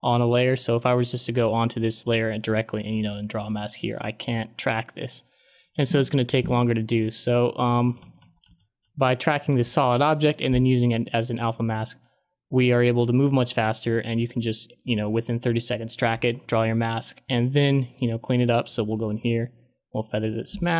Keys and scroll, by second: 7.4 ctrl+z, 7.8 ctrl+z, 19.0 f.